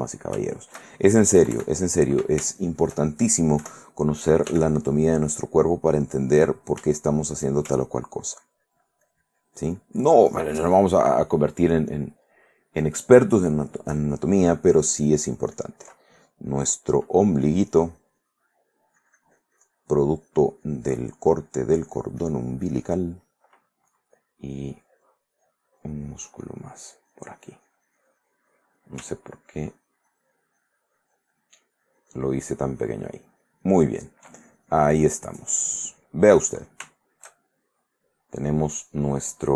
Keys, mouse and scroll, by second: 0.7 shift+click, 1.6 KP_Add, 2.6 shift+middle click, 3.8 KP_1, 4.7 f, 6.5 click, 6.9 shift+middle click, 8.2-16.1 ctrl+drag, 16.7-23.3 drag, 24.5-29.1 drag, 29.4-34.5 ctrl+drag, 34.9-36.4 drag, 36.6 middle click, 37.6 shift+middle click.